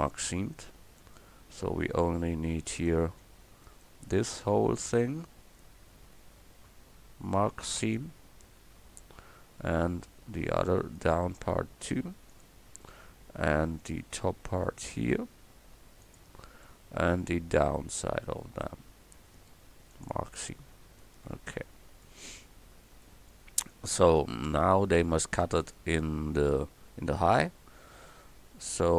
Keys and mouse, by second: 2.8 middle click, 3.0-6.7 drag, 3.7-6.7 right drag, 7.8-10.8 drag, 10.8-12.3 right drag, 12.3 middle click, 12.8-16.1 drag, 16.0 right click, 16.1 middle click, 16.6-18.4 drag, 20.5-22.1 drag, 21.3 a, 25.4-28.9 drag.